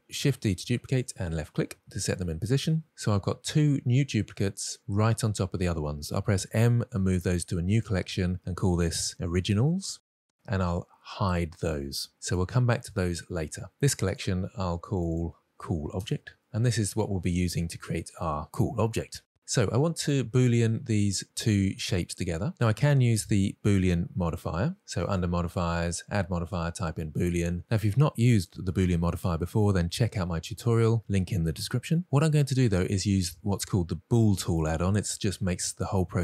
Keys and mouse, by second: 0.2 shift+d, 6.4 m, 9.1 BackSpace, 12.0 click, 14.0 click, 14.9 click, 15.0-16.3 drag, 15.5 o, 19.9-20.8 drag, 21.6 click, 25.0 click.